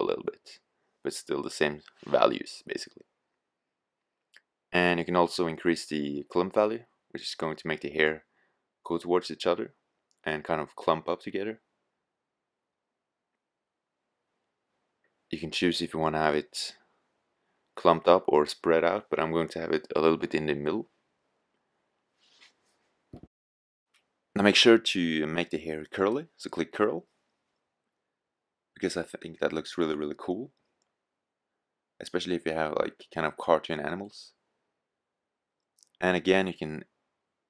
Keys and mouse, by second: 7.8-9.6 drag, 26.4 click, 32.2-33.9 drag.